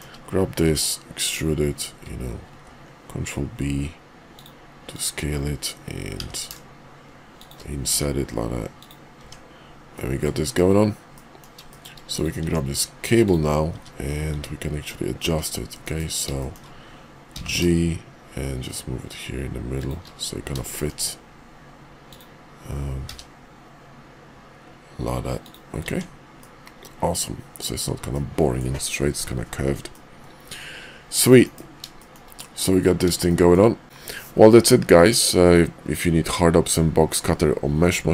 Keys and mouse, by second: 0.5 e, 2.4 ctrl+b, 4.8 click, 7.8 e, 9.2 Tab, 9.9-10.2 middle drag, 10.4 KP_5, 11.1 middle click, 11.7 shift+middle click, 12.1 middle click, 12.4 Tab, 13.1 click, 13.7 `, 14.3 `, 15.2 `, 15.8 KP_5, 16.3 shift+middle click, 17.3 g, 20.7 shift+middle click, 23.1 g, 25.8 Tab, 26.4-27.6 middle drag, 28.1 middle click, 29.9-31.2 middle drag, 31.4 KP_5, 32.0 shift+middle click, 32.4 middle click, 33.3 shift+middle click.